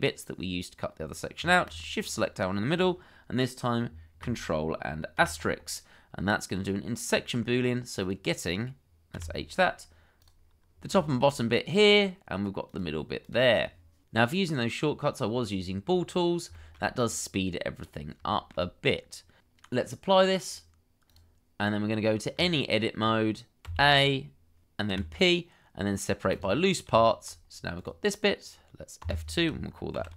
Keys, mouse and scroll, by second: 1.6 shift+click, 7.0-7.3 scroll up 1, 9.4 h, 10.7 scroll down 1, 11.0 shift+middle click, 15.8 scroll up 1, 16.5 shift+middle click, 17.7-18.2 scroll up 1, 18.3 shift+middle click, 22.3 Tab, 23.6 a, 24.9 p, 27.5-28.2 scroll down 1, 29.0 F2, 29.9 shift+t, 30.1 o.